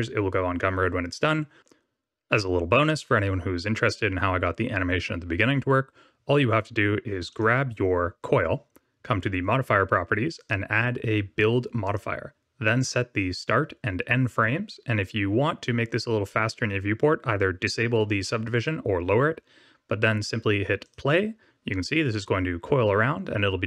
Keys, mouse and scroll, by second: 7.2 click, 20.7 click.